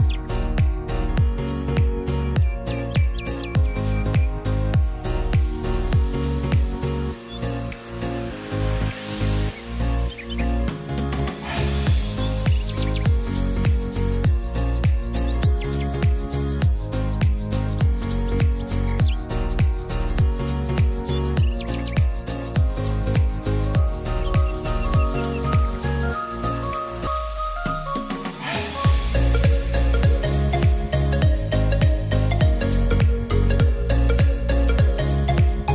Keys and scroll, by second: 0.7 ctrl+a.